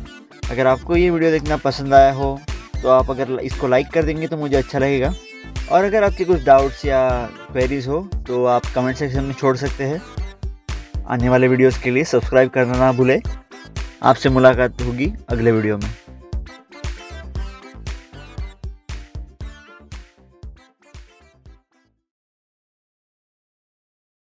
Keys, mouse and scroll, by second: 0.0 scroll up 1, 0.2 scroll down 1, 0.7 click, 0.8 scroll up 1, 1.4 click, 1.4 scroll down 1, 2.3 click, 2.4 scroll up 1, 2.6 scroll down 1, 3.0 middle click, 3.1 middle click, 3.1 scroll down 1, 3.3 click, 4.0 scroll up 1, 4.2 click, 5.7 middle click, 7.3 middle click, 7.4 scroll up 1, 8.8 click, 11.6 scroll down 1, 13.2 scroll up 1, 13.3 middle click, 13.9 middle click, 14.3 scroll up 1, 14.5 scroll down 1, 15.3 middle click, 16.8 middle click.